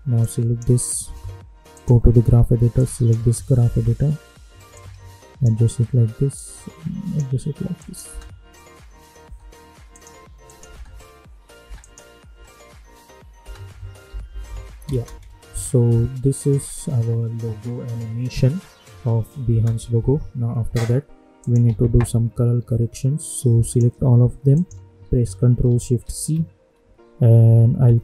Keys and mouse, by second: 0.2-3.6 drag, 3.6 =, 4.7-6.3 drag, 6.3-7.7 drag, 8.0 space, 9.9 click, 10.7 space, 11.8 click, 12.3 space, 14.0 -, 14.2 -, 14.4 -, 14.8 space, 19.4 space, 21.4 click, 22.0 u, 23.6 click, 24.5 shift+click, 26.1 ctrl+shift+c.